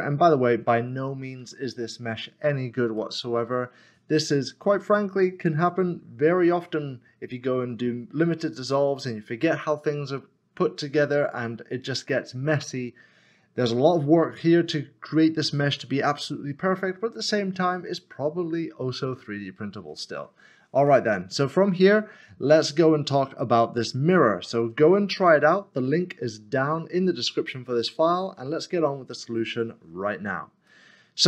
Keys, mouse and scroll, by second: 1.4 Tab, 3.0 middle click, 20.9 middle click, 30.7 middle click.